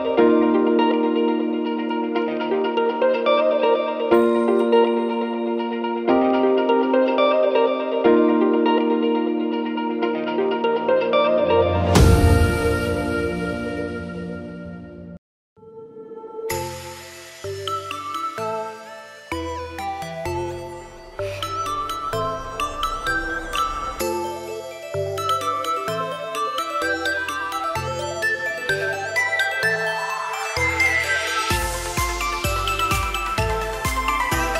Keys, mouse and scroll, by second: 5.0 click, 6.6 Tab, 7.7-8.5 scroll up 1, 8.5 click, 8.5 scroll up 1, 9.3 middle click, 12.8 click, 15.4 middle click, 16.0 Tab, 17.0 alt+a, 17.8 l, 21.1 click, 28.4 click, 29.5 alt+a, 29.9 Tab, 30.4 alt+a, 30.6-31.5 scroll down 4, 31.0 middle click, 32.6 scroll up 3, 32.8 shift+middle click.